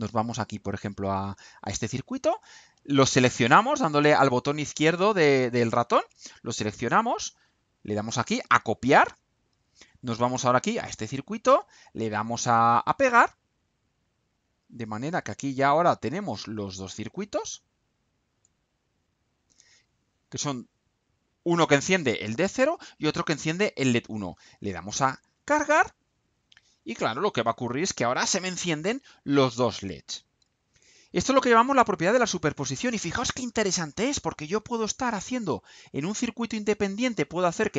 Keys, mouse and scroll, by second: 2.4-6.3 drag, 8.9 click, 10.5 click, 13.1 click, 14.3-15.3 drag, 15.7-16.7 right drag, 16.9-18.5 drag, 19.0 click, 25.1 ctrl+u.